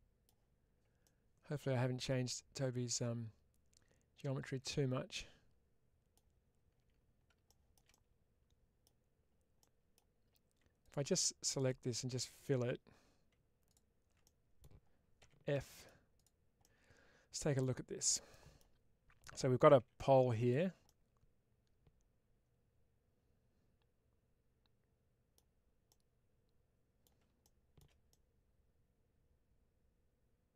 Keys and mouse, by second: 0.9-6.8 middle drag, 7.8 middle click, 9.5 middle click, 10.7 alt+click, 14.1 middle click, 15.1 f, 15.4 middle click, 16.5-17.5 middle drag, 18.2 middle click, 19.7 1, 20.7-25.2 middle drag, 25.8-26.9 middle drag, 28.0-30.5 middle drag.